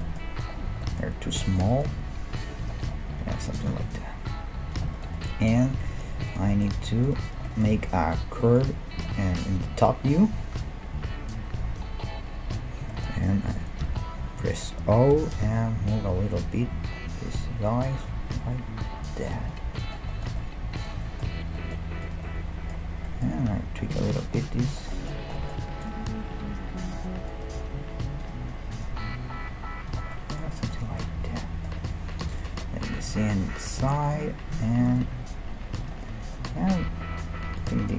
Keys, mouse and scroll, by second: 0.0-1.9 middle drag, 2.0 s, 3.4 g, 6.0-9.0 right drag, 9.0-11.0 middle drag, 10.5 KP_7, 11.0-11.4 scroll up 1, 11.4-13.0 middle drag, 11.8 KP_5, 13.8 o, 15.2 g, 16.4 middle click, 19.8-22.0 middle drag, 22.0-23.2 right drag, 23.5 g, 26.4 g, 27.3 middle click, 27.3-30.5 right drag, 27.6 g, 28.9 g, 30.3-31.6 middle drag, 32.3 KP_3, 32.8-33.3 scroll up 1, 33.7 g, 34.9-36.4 right drag, 35.1 g, 36.1 middle click, 36.4 click, 36.8-37.9 middle drag, 37.5-37.9 right drag.